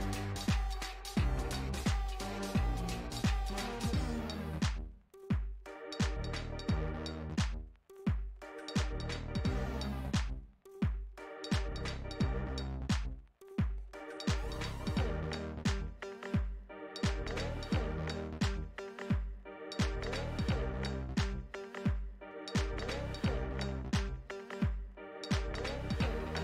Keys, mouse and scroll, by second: 3.0-7.7 middle drag, 7.7-10.2 drag, 10.2-11.9 middle drag, 11.9-14.6 drag, 15.2-18.6 middle drag, 18.6-21.4 drag, 21.5-22.9 middle drag, 22.9-26.3 drag.